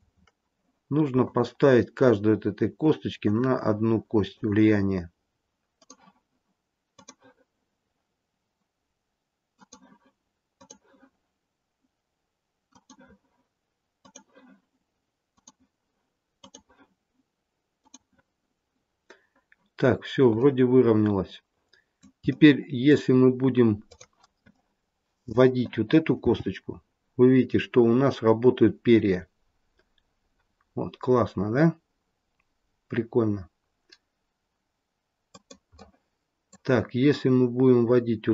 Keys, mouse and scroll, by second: 0.0-1.1 scroll up 3, 1.1 click, 3.1 click, 5.7 click, 6.8 click, 10.5 click, 12.6 click, 15.2 click, 16.2 click, 18.6-19.2 scroll down 1, 19.2-20.3 scroll down 3, 20.3 middle click, 23.1 middle click, 23.1-23.7 scroll up 1, 23.7 click, 23.7-24.4 scroll up 1, 24.4 middle click, 26.2 g, 35.7 middle click, 36.8-38.3 scroll down 2.